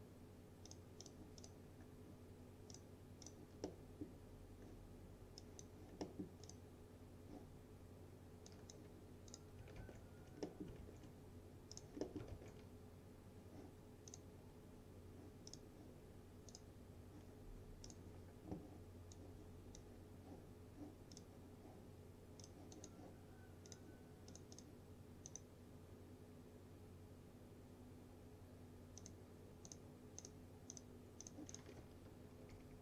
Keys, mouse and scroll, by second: 1.9-2.8 scroll down 1, 2.8 click, 3.7-4.3 middle drag, 5.5 click, 6.1 middle click, 6.5 click, 9.9 ctrl+s, 10.5 middle click, 10.9 ctrl+s, 11.8 click, 12.1 middle click, 12.4 ctrl+s, 14.2-20.1 drag, 29.0 click, 32.5 ctrl+z.